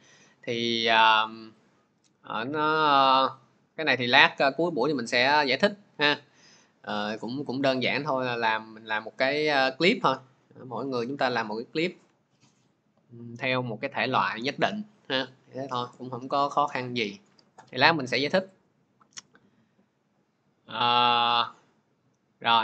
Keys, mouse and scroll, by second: 18.3 click, 19.2 scroll, 19.8-20.1 scroll, 20.5-21.4 scroll, 22.1-22.6 scroll.